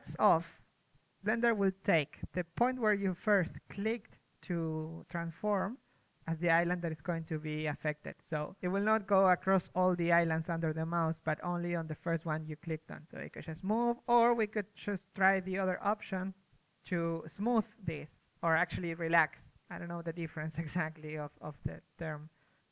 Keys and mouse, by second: 1.5 ctrl+z, 4.5 middle click, 8.2-9.1 drag, 9.3 ctrl+z, 11.4-12.3 drag, 14.4-15.5 middle drag, 14.8 f, 15.5-16.8 drag, 16.8 ctrl+z, 17.4 shift+f, 18.7-19.5 drag.